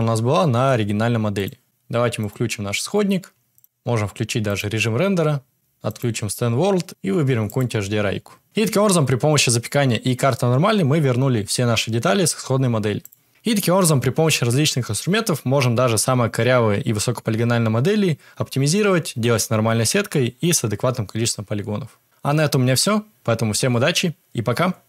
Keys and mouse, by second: 0.5 g, 2.1 click, 2.9 shift+click, 3.5 click, 5.5-8.4 drag, 13.0 click.